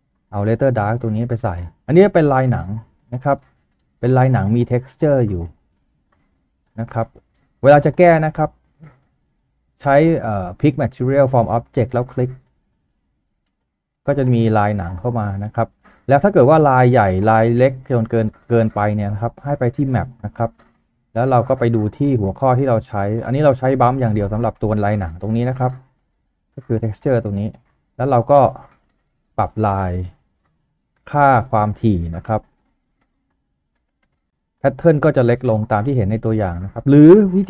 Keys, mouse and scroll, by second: 31.0 scroll up 1, 32.9-34.1 typing, 33.4 Tab, 34.1 Return.